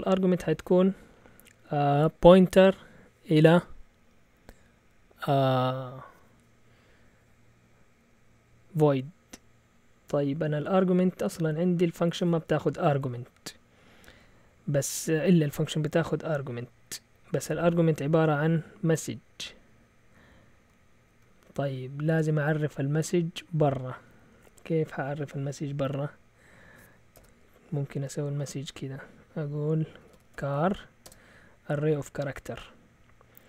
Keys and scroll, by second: 16.1 Down, 16.4 Down, 17.1 Left, 17.8 typing, 17.8 Left, 17.9 Left, 17.9 Left, 18.2 Left, 18.9 typing, 20.3-21.3 typing, 24.3 typing, 27.1 Return, 29.9-31.0 typing.